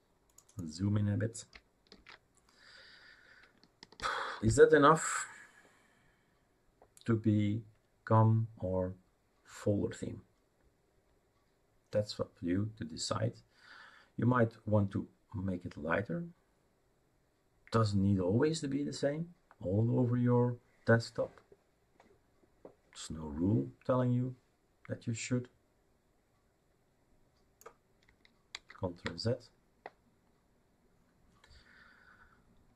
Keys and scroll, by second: 1.9 ctrl+v, 28.5 ctrl+z.